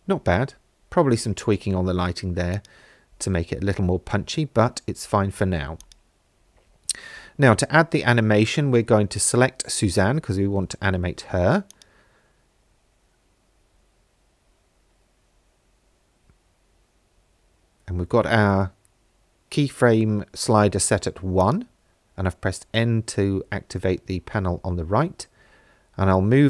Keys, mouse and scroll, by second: 2.6 click, 5.9 click, 9.1-9.9 scroll down 4, 11.7 click, 13.2-13.9 scroll up 3, 18.6 n, 21.4 click, 26.0 i.